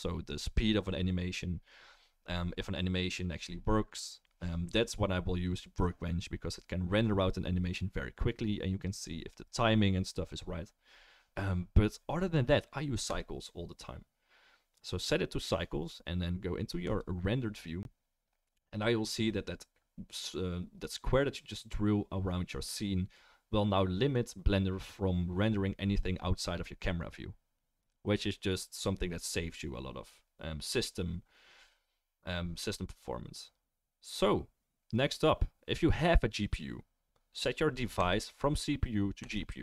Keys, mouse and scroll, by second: 38.0-39.6 middle drag.